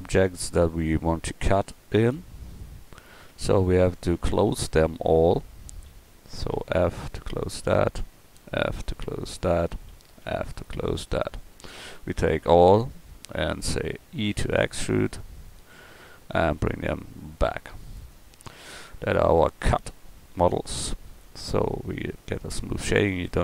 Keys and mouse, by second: 2.1 click, 2.6-3.9 drag, 3.3 Tab, 6.5 f, 7.5 click, 8.4 f, 10.2 f, 10.9 Tab, 11.5 Tab, 12.0 a, 12.2 a, 14.3 e, 15.5-17.6 drag, 18.4 Tab, 22.3-23.4 drag.